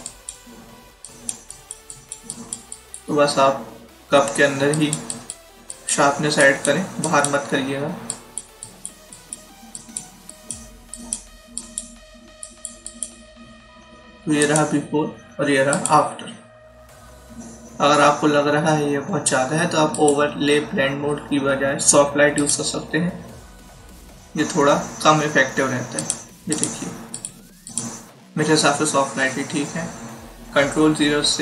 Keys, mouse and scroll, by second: 4.2 [, 4.6 click, 19.8 click, 22.3 click, 25.9 click.